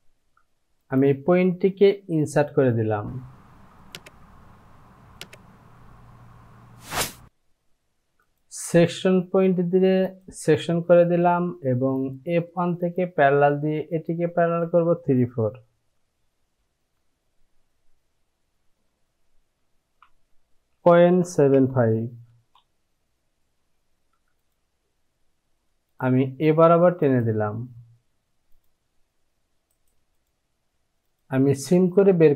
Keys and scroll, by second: 17.1 Right, 20.8 KP_Decimal, 21.3 KP_7, 22.3 KP_5.